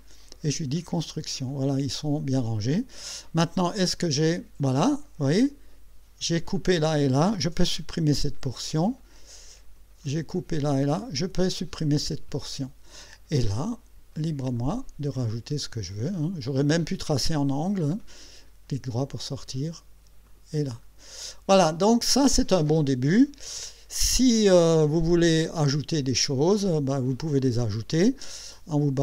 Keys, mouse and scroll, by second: 0.0 click, 0.8 click, 1.4 click, 4.0 click, 8.1 Delete, 10.1 click, 11.2 Delete, 14.6 click, 15.6 click, 16.5 click, 18.5 right click, 19.5 click, 20.3 click, 20.8 right click, 23.6 middle click.